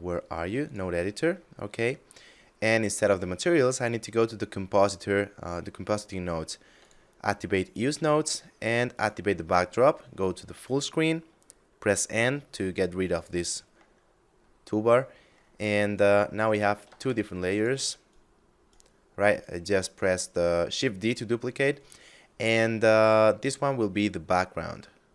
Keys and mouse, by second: 0.0 click, 1.3 middle click, 3.2 click, 6.2 click, 8.3 click, 9.3 shift+space, 12.5 n, 13.6 middle click, 15.4 right click, 16.3 shift+d, 17.0 click, 17.4 right click, 21.2 right click, 21.7 middle click, 22.8 click.